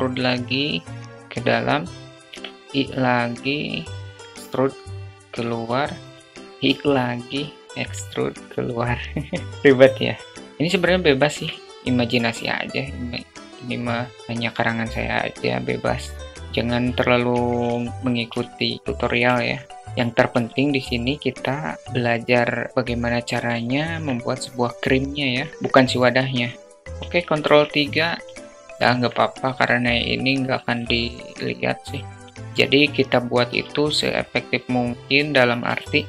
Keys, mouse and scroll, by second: 0.3 alt+middle click, 0.9 i, 2.6 e, 4.6 i, 6.3 e, 8.7 alt+middle click, 10.5 ctrl+r, 13.2 ctrl+r, 16.9 3, 17.1 click, 18.2 i, 19.4 i, 19.8 ctrl+2, 20.4 ctrl+r, 22.5 middle click, 24.3 click, 26.7 ctrl+3, 26.7 `, 26.9-28.1 alt+middle drag, 28.3 middle click, 30.8 Tab, 32.3 ctrl+alt+r, 32.4 alt+middle click, 33.4 alt+middle click, 36.0 3.